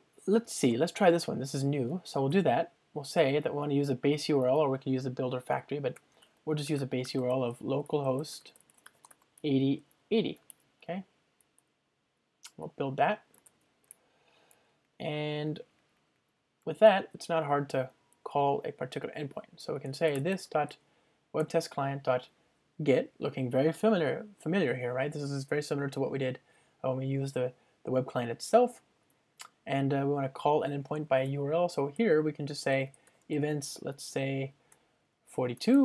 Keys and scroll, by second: 1.9 Return, 10.1 Return, 12.5 Return, 17.4 alt+super+l, 21.5 Return, 28.7 Return, 34.8 Return.